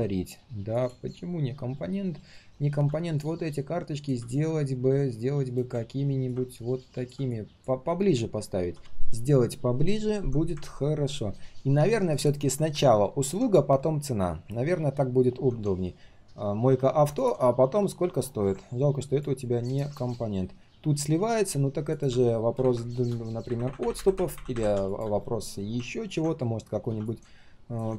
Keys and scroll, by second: 1.7 ctrl+shift+3, 2.2 ctrl+shift+3, 8.6 ctrl+z.